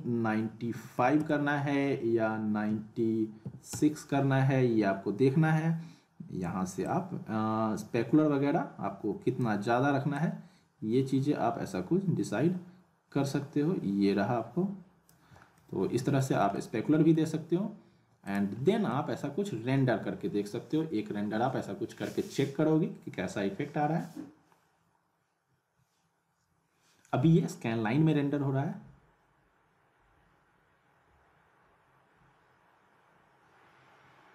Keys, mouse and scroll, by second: 6.8-9.6 drag, 10.1-15.2 drag, 15.6-16.2 alt+middle click, 16.4 scroll down 1, 16.5-17.2 middle drag, 18.2 click, 18.9 middle click, 19.9 shift+q.